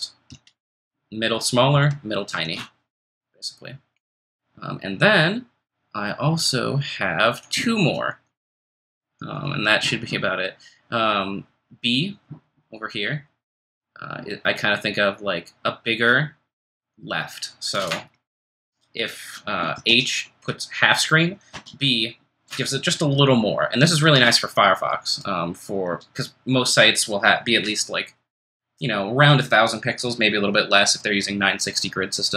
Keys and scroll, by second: 0.3 ctrl+shift+super+n, 1.7 ctrl+shift+super+m, 19.9 ctrl+shift+super+h, 22.9 ctrl+shift+super+b, 25.9 o.